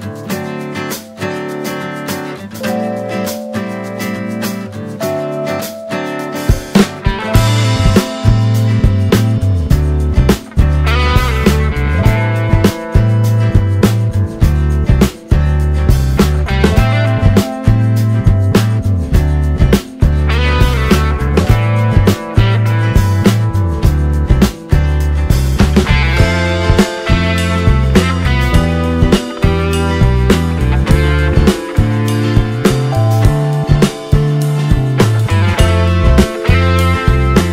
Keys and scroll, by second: 2.3 space, 13.7 space.